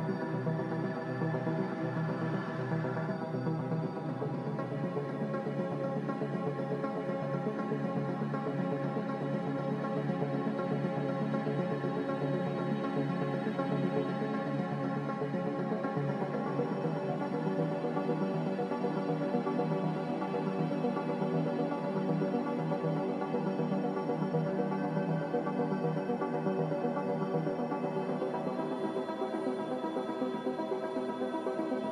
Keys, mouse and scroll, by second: 8.3 m, 9.2 Escape.